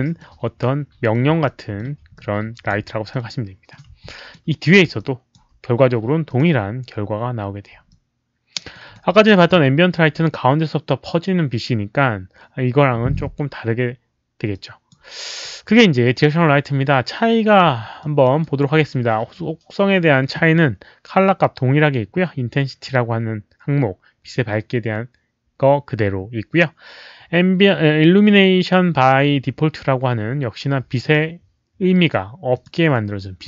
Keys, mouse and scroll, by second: 0.1 middle click, 0.8-2.8 typing, 1.1 click, 1.4 alt+middle click, 2.1 alt+click, 3.0 middle click, 4.0 alt+click, 4.9 alt+click, 6.2 click, 7.8 alt+click, 8.7 alt+right click, 9.0 alt+click, 14.5 click, 14.6 alt+right click, 14.8 alt+right click, 17.9 alt+click, 18.3 alt+right click, 31.0 click, 32.5 click.